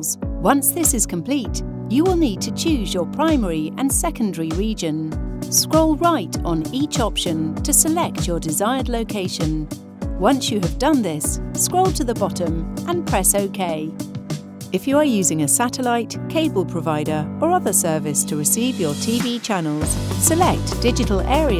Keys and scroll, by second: 3.4 Right, 4.1 Right, 4.9 Right, 5.9 Down, 10.8 Down, 12.3 Down, 13.1 Return, 20.0 Return, 21.0 Down.